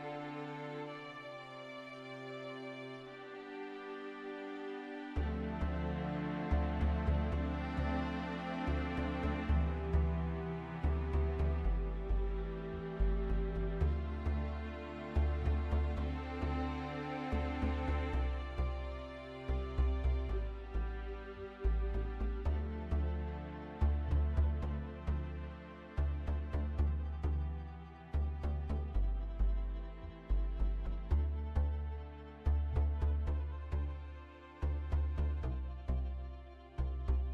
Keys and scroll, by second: 0.3-4.2 typing, 4.4 Return, 15.9 typing, 18.9 Return, 18.9-20.8 typing, 22.1-29.6 typing, 31.1-37.3 typing.